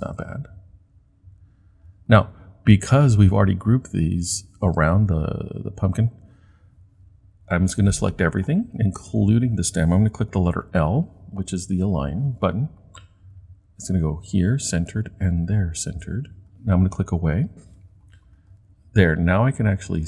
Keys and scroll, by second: 10.6 |.